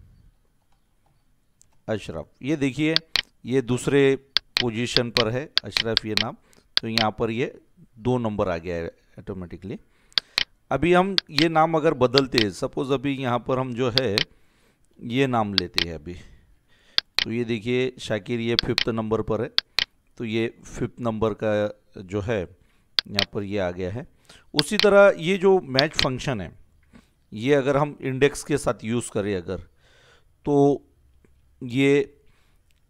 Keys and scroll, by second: 0.0-1.5 typing, 1.6 Return, 14.9 ctrl+c, 16.3 ctrl+v, 27.5 ctrl+s.